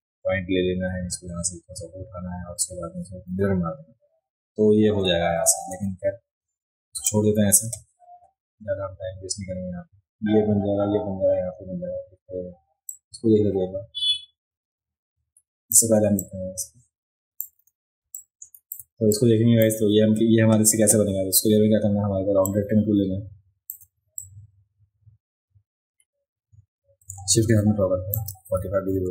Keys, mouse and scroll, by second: 12.9-15.7 drag, 16.2-17.4 drag, 18.0 space, 18.1 click, 19.1 click, 19.1 right click, 22.5-23.7 drag, 24.2-28.1 drag.